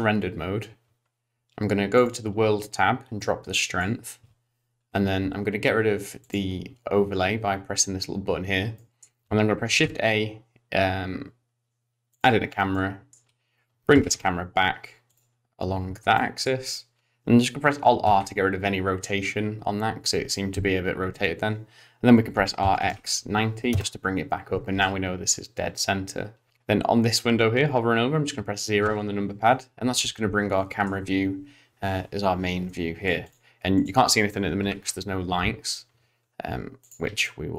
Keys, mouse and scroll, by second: 2.0 click, 3.3 click, 6.2 click, 8.7 middle click, 9.7 shift+a, 13.9 middle click, 13.9 g, 15.4-16.0 scroll down 5, 16.2 shift+middle click, 18.1 alt+r, 22.4 r, 26.5 middle click, 28.8 KP_0, 30.0 scroll up 2, 30.6 shift+middle click, 32.6 middle click, 33.2 click, 33.8 click, 34.6 g, 37.2 shift+middle click.